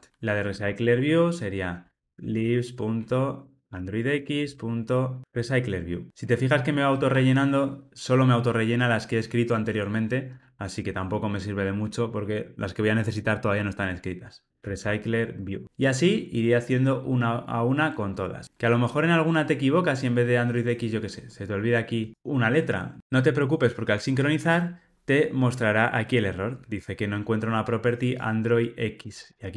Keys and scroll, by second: 4.0 Tab, 15.3 Tab.